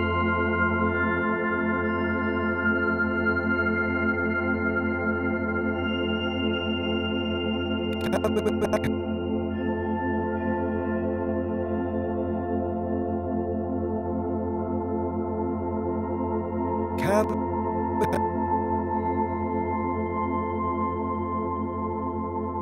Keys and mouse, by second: 0.2 y, 0.3 y, 3.1 click, 3.8-5.0 alt+drag, 6.0-9.9 drag, 11.0-11.5 alt+drag, 12.0-14.0 alt+drag, 14.1 alt+click, 15.4-16.4 drag, 17.9-20.4 drag.